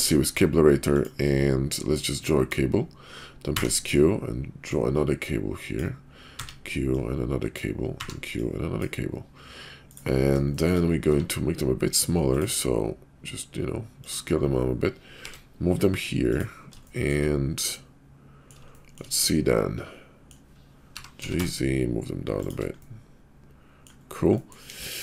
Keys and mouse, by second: 2.1-10.0 drag, 10.5 shift+middle drag, 11.0 q, 15.1 g, 16.8 shift+middle drag, 17.7-18.5 middle drag, 18.7 shift+middle drag, 19.2-20.2 middle drag, 20.9 g, 22.8-23.9 middle drag, 24.4 middle click, 24.7 KP_5.